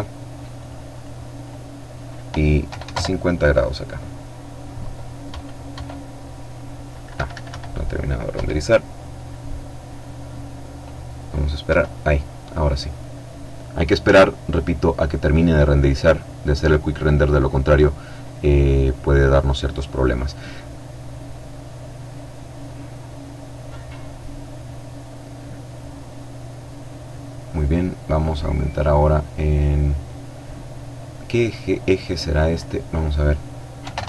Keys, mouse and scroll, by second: 1.6 KP_5, 1.8 KP_0, 1.9 KP_Enter, 4.2 F12, 6.1 Escape, 7.3 F12, 10.6 F12, 30.2-32.0 drag, 32.7 KP_5, 32.8 KP_0, 33.0 KP_Enter.